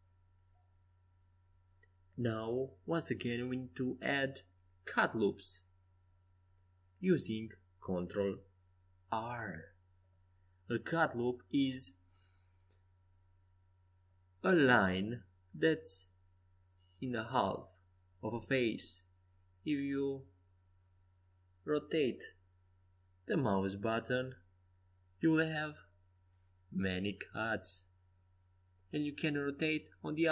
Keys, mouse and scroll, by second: 6.5 ctrl+r, 9.6-11.0 middle drag, 13.5 Tab, 14.7 ctrl+r, 24.7 ctrl+r.